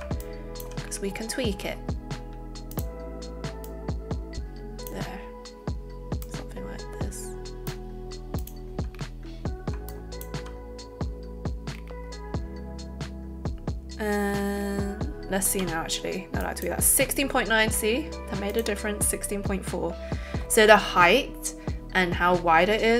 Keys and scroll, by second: 15.6 b.